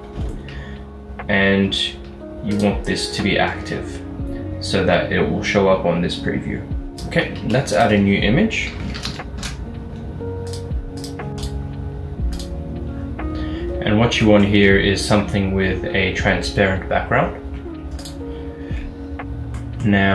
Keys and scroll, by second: 2.7-3.4 typing, 7.5 a, 8.8-9.3 typing, 9.5 Return.